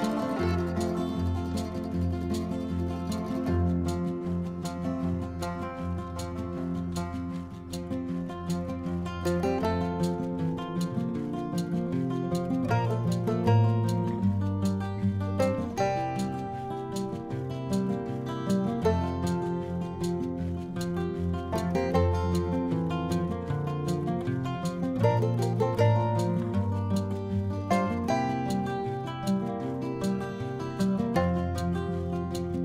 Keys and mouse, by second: 0.0 click, 1.1 click, 1.7 click, 4.9 click, 10.0 Delete, 10.0 Return, 10.8 click, 11.6 Tab, 12.9 click, 13.9 click, 14.6 click, 15.4 Tab, 16.3 click, 16.7 Tab, 17.3 middle click, 17.8 middle click, 18.2 middle click, 18.8 middle click, 19.6 click, 19.9 click, 20.4 click, 21.5 click, 22.4 middle click, 22.8 middle click, 24.0 click, 24.6 click, 25.5 click, 25.9 click, 27.1 middle click, 27.9 click, 29.0 click, 30.1 click, 30.9 click.